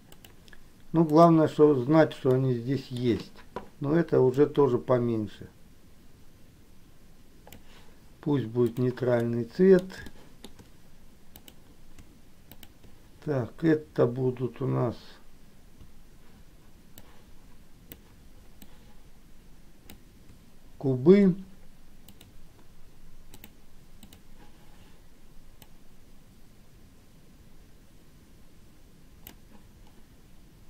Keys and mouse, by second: 1.2 click, 2.4 middle click, 4.7-8.0 drag, 8.7 click, 9.4 middle click, 10.2 shift+middle click, 11.4 click, 12.8 shift+click, 17.1-18.2 shift+drag, 18.9-20.3 shift+drag, 22.3-23.7 drag, 24.1 click, 26.1-29.4 drag.